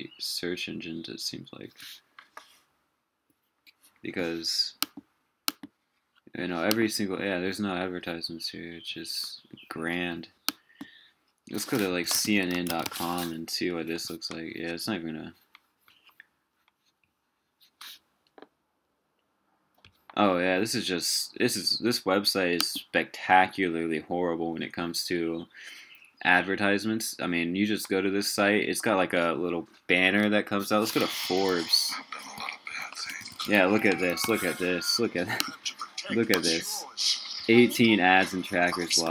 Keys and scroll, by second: 11.9 super+t, 31.0 ctrl+super+t, 32.7 super+t.